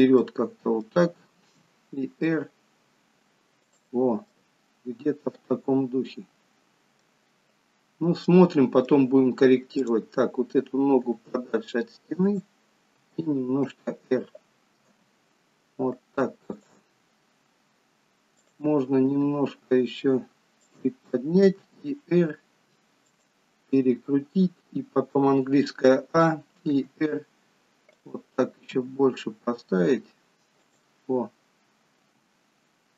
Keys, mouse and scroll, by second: 0.3 middle click, 1.6 r, 4.5 middle click, 7.9-8.3 scroll down 2, 8.3 middle click, 9.9 click, 11.3 g, 13.1 r, 15.0 g, 17.3 scroll up 3, 18.4 click, 19.3 g, 21.8 r, 25.2 a, 26.8 r, 28.8 g, 32.2 g.